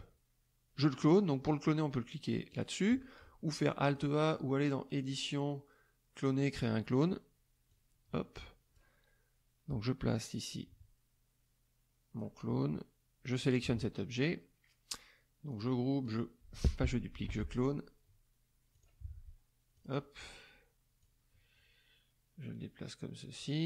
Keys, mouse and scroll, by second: 2.5 click, 3.8 click, 7.6-8.9 drag, 10.2-12.3 drag, 13.4 click, 15.5 click, 16.0 click, 17.2 ctrl+z, 18.7 click, 19.8 click, 21.0-23.6 drag.